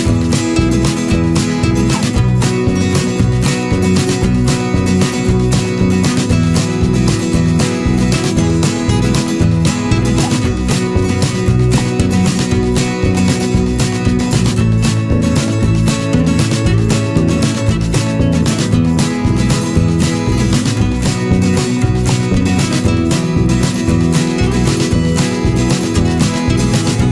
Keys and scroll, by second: 2.7 ctrl+=, 5.9 Return, 6.8 ctrl+=, 6.9 ctrl+space.